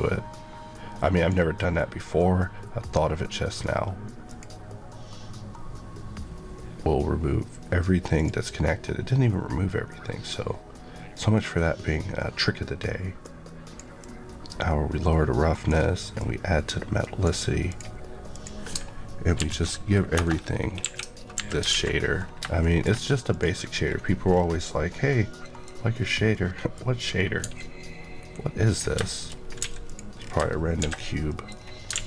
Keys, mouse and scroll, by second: 18.3 click, 19.3 alt+m, 20.1 Return, 20.7 KP_1, 21.6 alt+KP_3, 21.6 alt+a, 22.1 scroll down 1, 22.6 shift+middle click, 23.3 click, 24.3 scroll down 1, 24.9 middle click, 25.5 scroll down 1, 26.3 middle click, 27.4 x, 28.1 KP_Decimal, 28.6-29.3 scroll up 3, 29.0 shift+middle click, 29.6 x, 29.8 click, 30.1 scroll, 30.2-30.8 scroll down 2, 30.8 shift+c, 31.2 middle click, 31.5-31.9 scroll up 2, 31.9 alt+a.